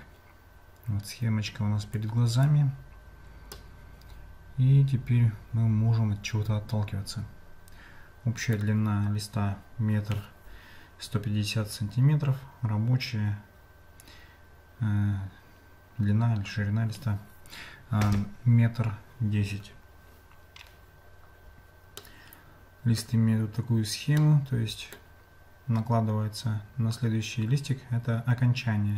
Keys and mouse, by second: 2.0 click, 3.6-8.6 middle drag, 22.0-23.0 middle drag, 24.2 middle click.